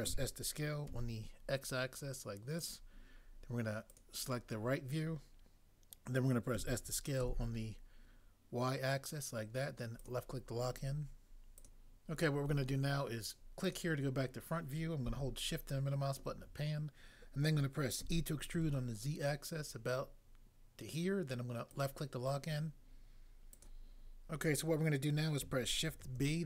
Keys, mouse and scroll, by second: 0.0 s, 0.9 x, 6.6 s, 7.2 y, 18.1 e, 18.5 z, 26.0 b.